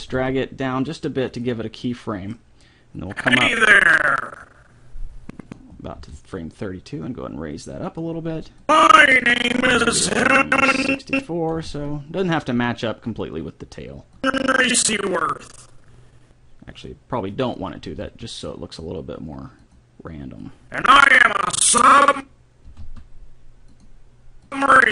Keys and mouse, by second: 0.0 g, 3.1-4.9 drag, 6.0 g, 8.6-10.4 drag, 11.6 g, 14.2-15.7 drag, 17.2 middle click, 17.7 middle click, 17.8 g, 18.4 middle click, 20.4-21.6 drag, 22.8 g, 24.5-24.9 drag.